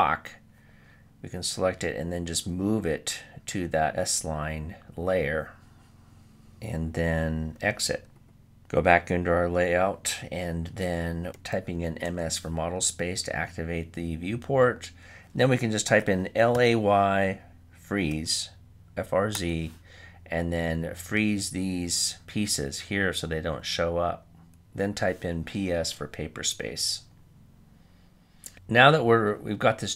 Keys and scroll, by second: 10.8-11.6 typing, 16.6 typing, 26.9-27.7 typing.